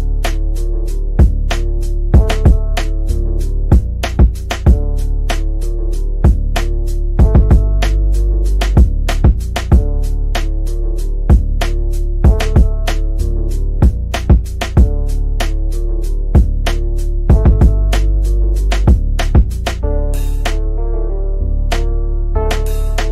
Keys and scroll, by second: 19.2 F3, 19.4 Escape, 20.4 Delete.